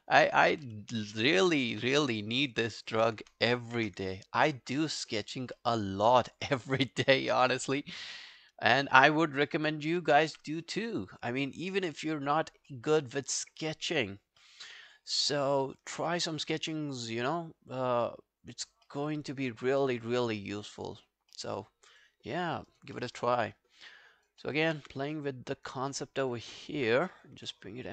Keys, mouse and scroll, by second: 0.7 space, 1.7 space, 2.4 alt+middle click, 2.7 alt+right click, 2.9 alt+click, 4.2 alt+click, 5.1 alt+middle click, 5.3 alt+right click, 5.6 alt+middle click, 6.1-6.9 alt+scroll down 3, 6.3 alt+click, 7.1 alt+click, 8.3 right click, 9.5 alt+middle click, 9.7 alt+right click, 12.7 alt+middle click, 12.9 alt+right click, 13.2 alt+click, 14.4 alt+middle click, 14.7 alt+right click, 14.9 alt+click, 15.3 alt+middle click, 15.5 alt+right click, 15.7 alt+click, 16.0 w, 16.6 r, 18.9 alt+middle click, 19.2 alt+scroll down 1, 19.5 alt+click, 19.8 alt+middle click, 20.1 alt+scroll up 2, 20.3 alt+click, 21.1 alt+scroll down 4, 21.3 alt+middle click, 21.7-22.4 alt+scroll up 3, 21.9 alt+click, 22.5 alt+middle click, 22.7 alt+right click, 23.0 alt+middle click, 23.2 alt+right click, 23.4 alt+click, 24.1 alt+right click, 24.5 alt+middle click, 24.8 q, 25.0 right click, 25.9 alt+middle click, 26.2 alt+right click, 26.5 alt+middle click, 27.4 w.